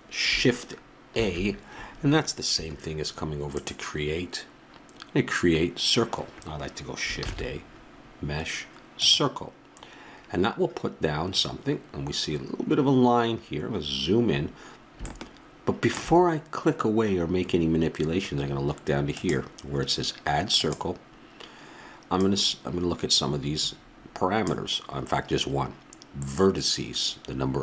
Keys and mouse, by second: 1.1 shift+a, 3.5-5.3 drag, 7.2 shift+a, 13.7 middle click, 15.1 middle click, 15.3 middle click, 19.1-23.9 drag.